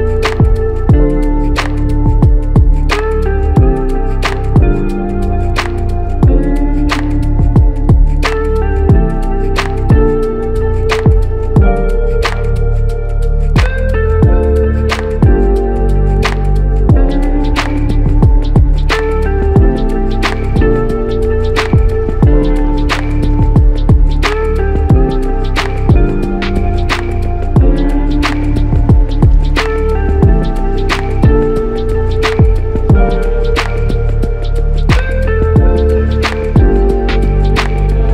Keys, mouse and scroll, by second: 15.7 double click, 34.2 alt+shift+click.